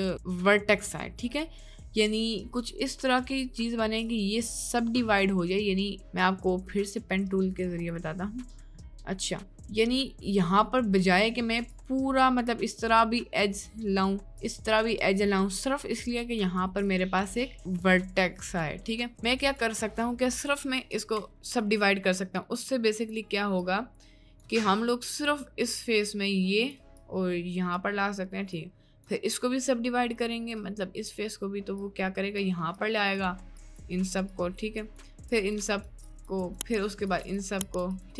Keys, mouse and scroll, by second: 6.9 click, 11.7 click, 14.4 click, 17.1 click, 19.4 click, 21.0 5, 21.6-23.2 ctrl+drag, 23.6 ctrl+click, 25.6-26.8 drag, 27.0 click, 28.4 click, 29.6 click, 31.8 click, 32.8 click, 33.6 click, 34.3 click, 34.8 click, 35.5 click, 36.1 click, 37.2 click, 37.8 click.